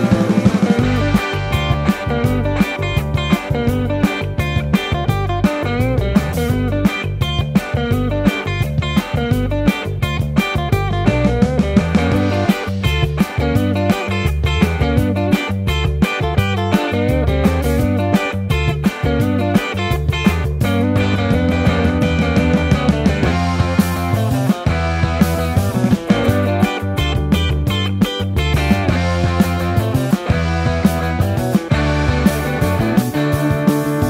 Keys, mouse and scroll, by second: 2.2 shift+d, 2.3 z, 3.1 ctrl+z, 5.3 KP_0, 5.8 shift+d, 6.1 y, 7.0 KP_0, 15.9 Tab, 18.4 ctrl+KP_Add, 20.7 ctrl+z, 21.2 ctrl+z, 21.6 ctrl+z, 25.3 ctrl+r, 26.4 ctrl+z, 28.3 ctrl+z, 29.5 2, 31.7 ctrl+b, 33.5 ctrl+z, 33.9 g.